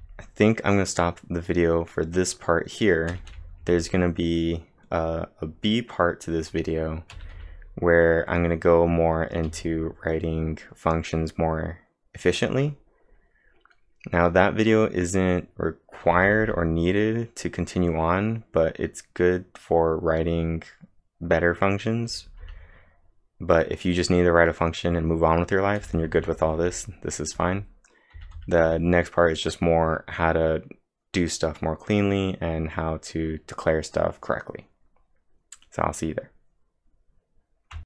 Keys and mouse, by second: 0.0-0.2 typing, 3.1-4.1 typing, 3.3 click, 7.1 k, 7.4 k, 9.5 k, 16.1-16.9 typing, 22.1 typing, 25.8-28.6 typing, 37.7 ctrl+Num_Lock, 37.7 typing.